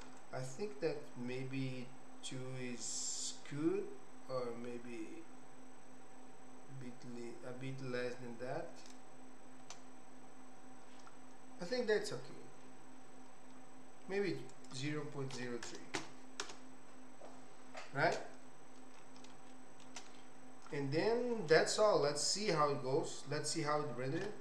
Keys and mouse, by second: 0.2-9.0 shift+drag, 14.5-17.6 drag, 19.7 shift+middle click.